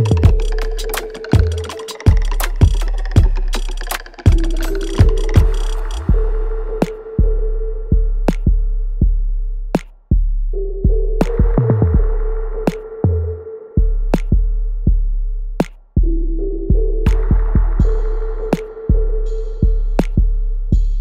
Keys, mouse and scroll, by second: 0.0 click, 0.7 alt+click, 1.2 alt+middle click, 1.5 alt+right click, 2.1 alt+click, 3.2 alt+right click, 3.6 alt+middle click, 4.0-6.2 alt+drag, 6.2 alt+right click, 6.6-8.4 alt+drag, 8.4 right click, 8.9 alt+click, 9.7 alt+click, 10.8 click, 11.8-13.3 alt+drag, 13.3 click, 13.6 alt+middle click, 14.2 alt+right click, 14.6 alt+click, 15.6 ctrl+s, 16.0 alt+click, 17.1 right click, 17.7 alt+click, 18.4 alt+right click, 19.1 click, 19.6 alt+click.